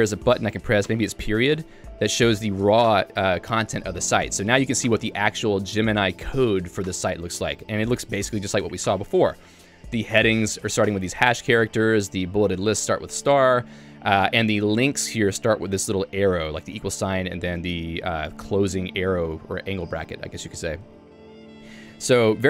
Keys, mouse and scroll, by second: 1.6 ., 3.4 j, 4.2 h, 5.0 shift+v, 5.3 j, 7.6 Escape, 9.5 k, 11.3 j, 12.5 k, 13.4 j, 15.5 Home, 16.0 l, 16.4 h, 16.9 l, 20.5 j, 21.9 ctrl+d.